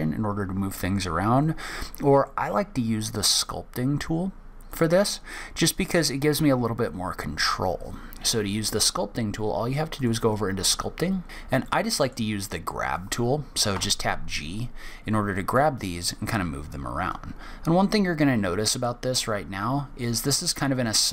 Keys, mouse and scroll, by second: 2.2 middle click, 4.7 click, 10.0 click, 11.2 scroll down 3, 11.3 scroll up 1, 11.6 middle click, 13.7 g, 15.5 click.